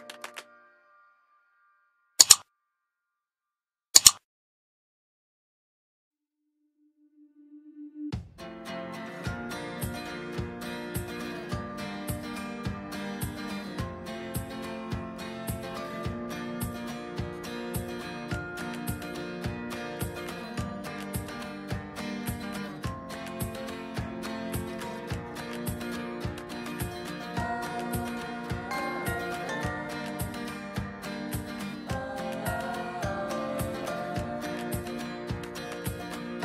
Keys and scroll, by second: 13.5 [, 14.0 [, 14.5-16.1 ], 22.9 ctrl+z.